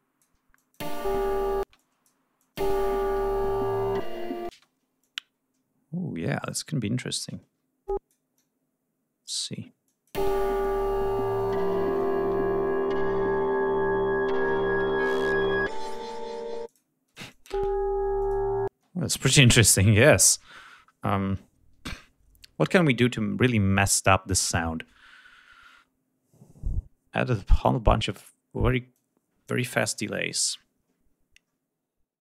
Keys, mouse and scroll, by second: 0.8 click, 1.0 space, 1.9 space, 2.0 click, 2.6 click, 2.8 space, 3.4 g, 3.7 ctrl+scroll down 2, 4.7 space, 5.2-6.8 drag, 7.6 e, 8.1 click, 8.6-9.8 drag, 10.1 click, 10.4 space, 11.6 click, 12.8 g, 14.4 d, 16.9 click, 17.3 space, 17.5-17.9 drag, 18.4 click, 18.9 space, 19.3 right click, 27.8 click, 30.5 click.